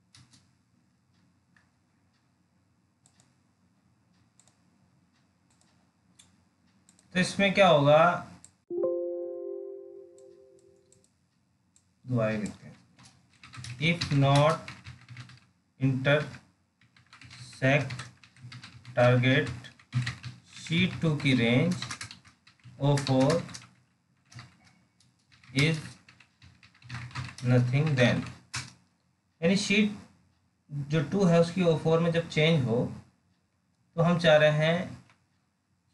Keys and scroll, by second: 35.3 alt+Tab.